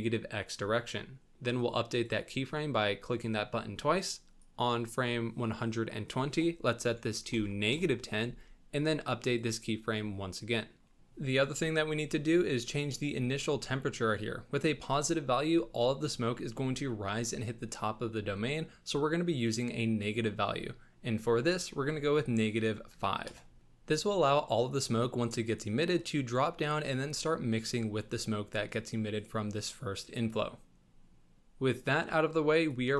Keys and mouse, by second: 1.5 click, 1.9 click, 4.4 click, 6.0-7.7 drag, 9.3 click, 9.5 click, 19.4-23.3 drag, 31.3 shift+g, 32.8 g.